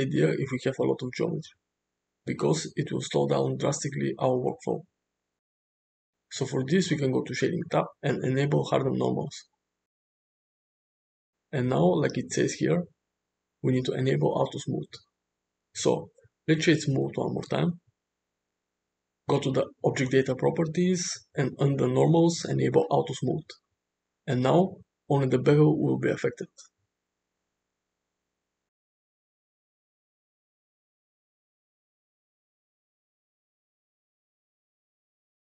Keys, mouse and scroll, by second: 0.7-5.7 drag, 7.2 click, 15.1-17.6 right drag, 20.2 click, 21.6 click.